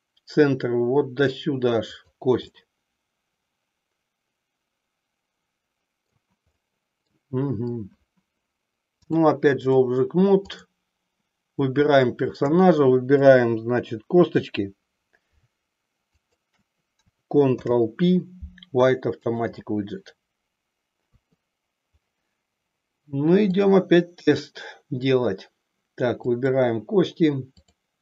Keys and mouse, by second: 2.0 click, 2.6-6.3 middle drag, 6.6 middle click, 9.0 click, 10.6 click, 12.2 shift+click, 16.1 shift+click, 17.5 ctrl+p, 21.2 KP_3, 23.5-25.3 drag, 26.3-26.8 drag, 27.5-28.0 drag.